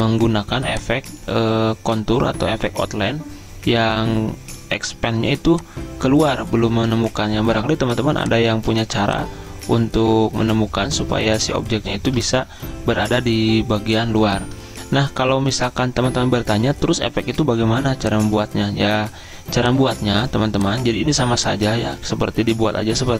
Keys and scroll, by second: 12.6 Down, 13.1 Down.